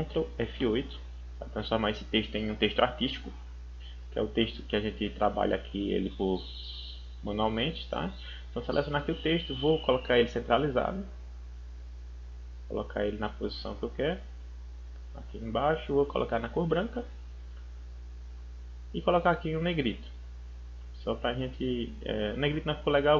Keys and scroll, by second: 0.5 ctrl+F8.